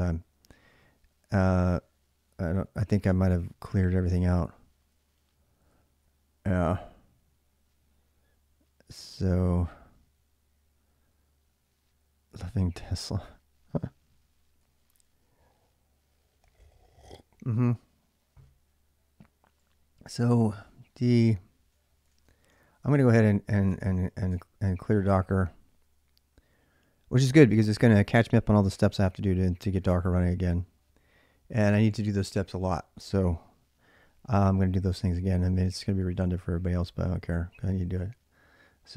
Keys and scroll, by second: 0.3-3.8 typing, 5.5-8.1 typing, 9.6 j, 9.8 j, 11.8 j, 12.3 j, 12.5 j, 13.8 j, 14.2 j, 14.4 j, 20.4 d, 21.6-22.5 typing, 22.7 ctrl+c, 23.5 Return, 24.1 Return, 24.8-25.7 typing, 34.5-35.6 typing.